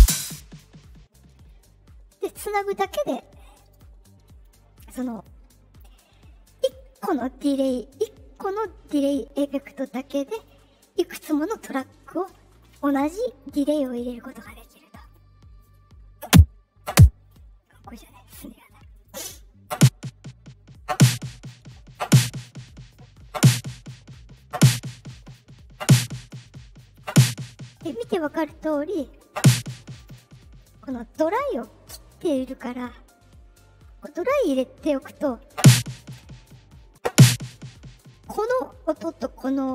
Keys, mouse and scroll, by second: 0.0 space, 3.5 click, 5.1 click, 6.9 click, 10.3 click, 12.1 click, 14.4 click, 14.9 click, 18.9 click, 29.9 click, 31.5 click, 33.0-34.3 drag.